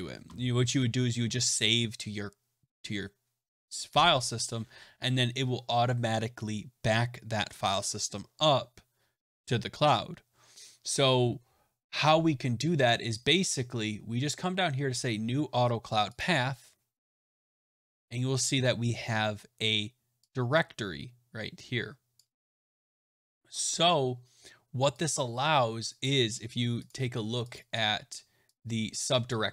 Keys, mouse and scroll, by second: 16.1 click, 22.1 click, 23.9-25.0 scroll, 25.0 click, 26.0 click, 26.8 click, 27.5 click, 28.5 click.